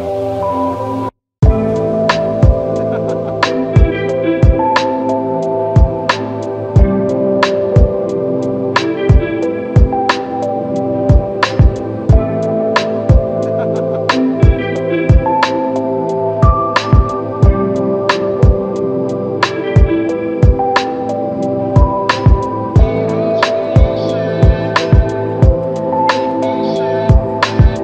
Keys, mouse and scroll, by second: 18.4-19.7 typing, 23.2 double click.